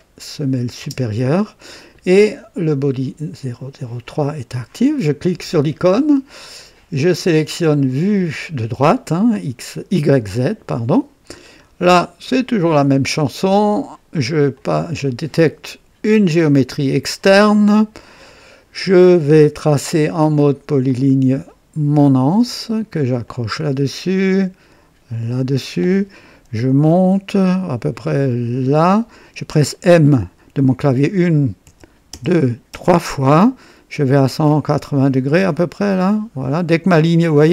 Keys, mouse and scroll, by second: 0.8 space, 0.8 space, 2.5-2.8 scroll down 1, 5.2 click, 7.1 click, 10.2 click, 11.4 scroll up 2, 11.9-12.5 right drag, 14.5 click, 16.3 click, 17.7 scroll up 2, 18.3 right click, 20.9 click, 23.2 click, 25.3 click, 28.7 click, 31.6-32.7 typing.